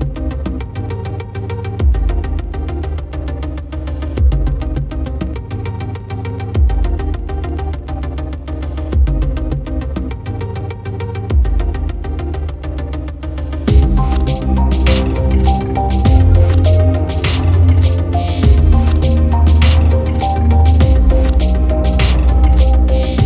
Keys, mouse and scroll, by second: 2.4 click, 2.8 Tab, 4.0 Tab, 5.0-7.0 typing, 8.4 click, 9.8 Tab, 12.4 space, 12.8 space, 16.6 click, 19.2 click, 20.2-21.5 drag, 22.4 click.